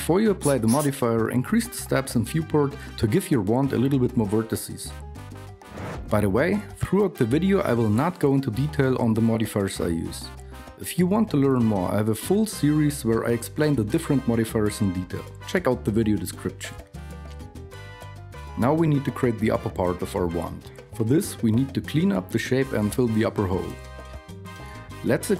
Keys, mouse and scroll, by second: 17.8 Tab, 23.0 Tab, 24.1 Tab, 24.8 alt+KP_2.